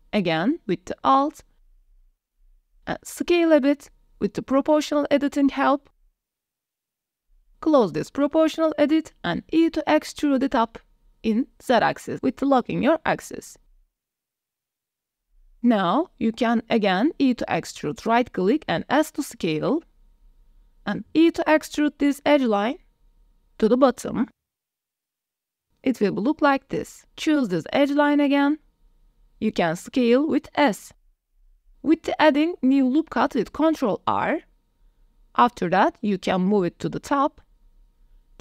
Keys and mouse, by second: 0.0 click, 0.6 2, 1.3 alt+click, 1.6 click, 2.0 shift+click, 2.4 KP_1, 3.4 s, 7.6 click, 9.3 click, 10.3 e, 11.4 z, 14.5 click, 15.2 click, 15.6 click, 15.8 middle click, 17.2 e, 18.8 s, 21.8 click, 22.1 click, 23.2 e, 24.0 z, 26.6 Tab, 26.9 click, 27.1 Tab, 27.3 click, 28.2 alt+click, 28.8 s, 31.4 click, 31.6 click, 33.5 ctrl+r, 38.0 click.